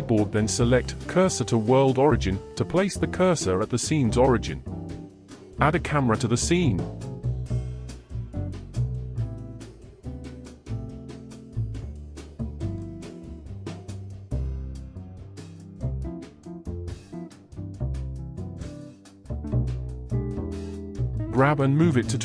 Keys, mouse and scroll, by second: 1.3 shift+a, 4.8 alt+g, 5.4-5.8 scroll down 2, 6.0-8.2 middle drag, 9.6-11.4 middle drag, 11.4 alt+r, 13.1-16.5 scroll down 4, 16.7-17.6 scroll down 1, 17.6 KP_1, 19.2-20.6 middle drag, 20.6 g.